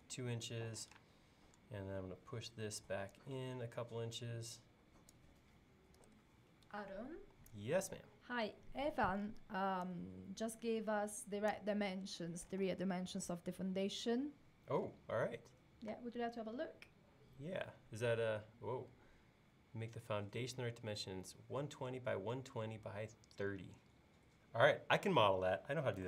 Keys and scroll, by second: 6.0 typing.